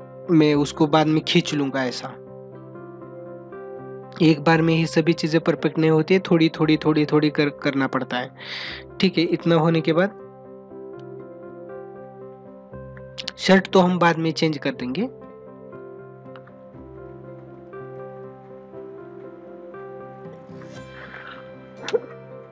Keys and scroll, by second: 4.6 ctrl+alt+z, 10.2 space.